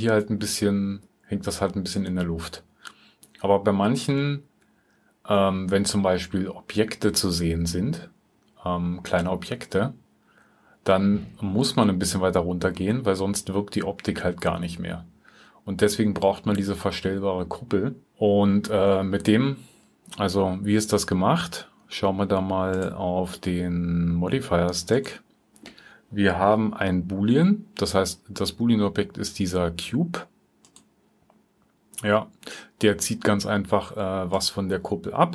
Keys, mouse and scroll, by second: 4.9 alt+click.